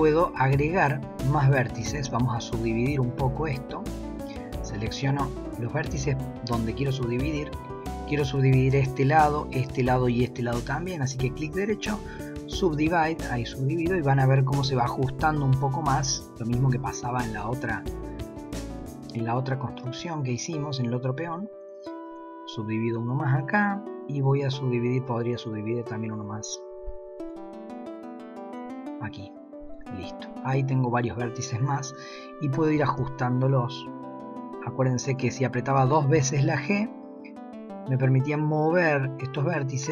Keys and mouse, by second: 1.5 click, 2.1 shift+click, 3.4 shift+click, 20.2 shift+click, 25.0 shift+click, 30.9 drag, 32.7 g.